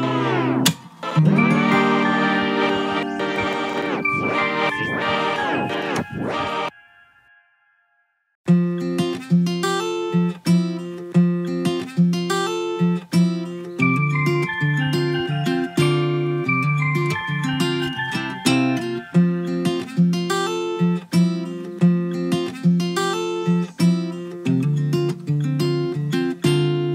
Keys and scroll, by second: 2.0 ctrl+g.